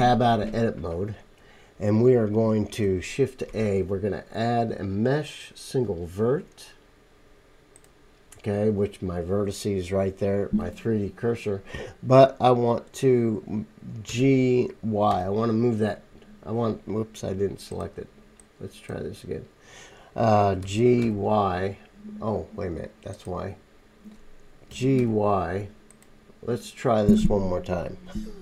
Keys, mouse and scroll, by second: 0.9-2.9 drag, 2.9-6.0 shift+right drag, 3.5 shift+a, 6.0-6.6 drag, 6.6-7.8 right drag, 7.8-18.4 drag, 14.1 g, 20.6 g, 21.0-23.7 drag, 21.0-23.7 middle drag, 21.0-23.7 right drag, 21.0 y, 24.7 g, 25.0 y, 25.9-28.4 drag, 25.9 middle click, 25.9 right click.